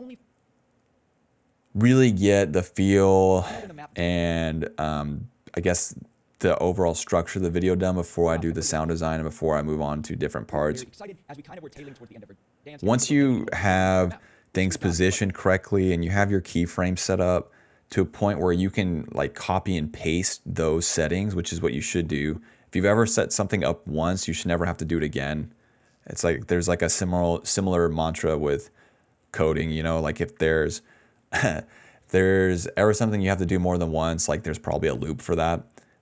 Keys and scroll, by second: 0.1 space, 0.2 s, 0.4 s, 1.4 ctrl+z, 2.7 d, 2.9 d, 3.3 space, 3.9 space, 8.2 space, 8.6 s, 8.9 space, 10.4 space, 11.2 s, 12.3-13.9 typing, 15.1 space, 15.4 s, 16.3 s, 16.6 d, 20.4 d, 23.0-24.6 typing.